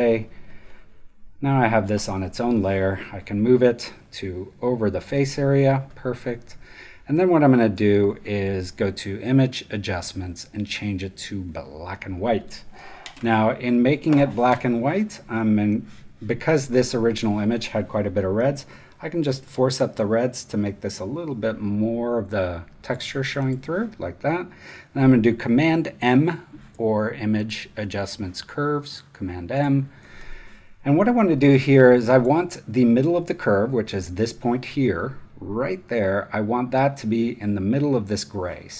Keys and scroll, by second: 2.1 v, 5.6 space.